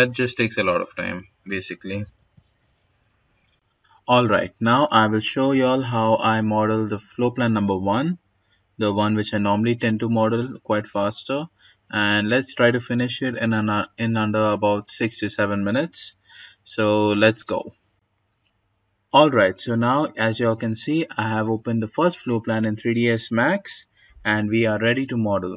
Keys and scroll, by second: 1.0 Delete, 17.9 g.